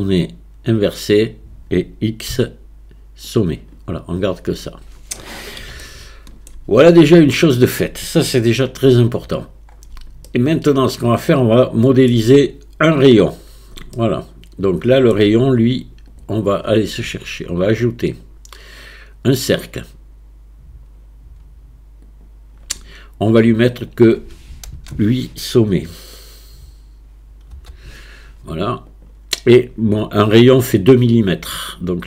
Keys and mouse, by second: 0.0-1.1 drag, 2.3 x, 5.9 shift+click, 6.5 right click, 7.4 shift+click, 8.9 Tab, 10.3-11.6 shift+middle drag, 11.6 shift+click, 14.0-15.0 shift+middle drag, 15.1 click, 15.1 right click, 16.1-16.6 drag, 18.2-22.3 drag, 23.9-28.9 drag.